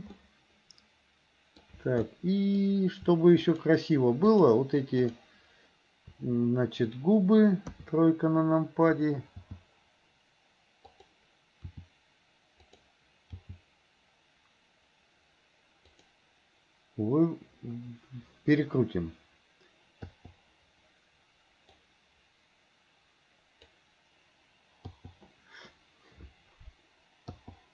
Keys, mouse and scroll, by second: 0.2-1.6 scroll up 1, 1.6 scroll down 1, 2.1 scroll up 1, 2.3 middle click, 2.6 scroll down 1, 4.4 shift+drag, 5.0 shift+click, 7.8 KP_3, 9.5 g, 11.8 r, 13.5 g, 22.0-23.8 drag, 27.4 i.